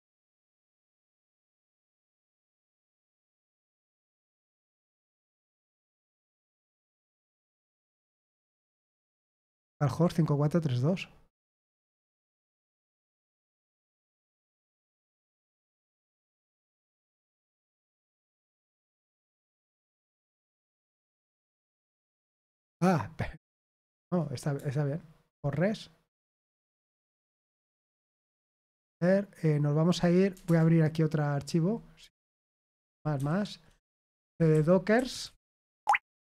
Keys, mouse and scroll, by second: 1.8 ctrl+c, 2.7 ctrl+p, 2.9 ctrl+p, 3.5 Return, 7.7-9.9 typing, 13.9 typing, 17.8-19.2 typing, 20.3 Return, 22.1 ctrl+p, 23.6 ctrl+p, 24.5 Return, 28.4 ctrl+c, 30.4 super+Return, 32.7 ctrl+*, 32.9 ctrl+*, 33.1 ctrl+*, 33.8-36.3 typing.